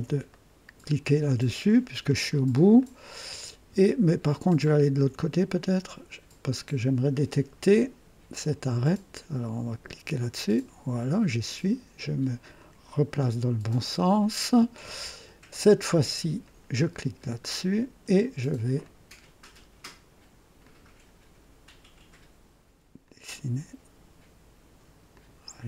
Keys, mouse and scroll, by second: 0.3 right click, 2.3 scroll up 1, 2.8 right click, 3.9-5.0 ctrl+alt+drag, 5.3-6.3 ctrl+alt+right drag, 8.4 click, 10.1 click, 12.5 click, 13.6 right click, 16.4 click, 17.5-17.8 scroll up 1, 18.8 click, 20.6 click, 23.0 click, 25.1 click.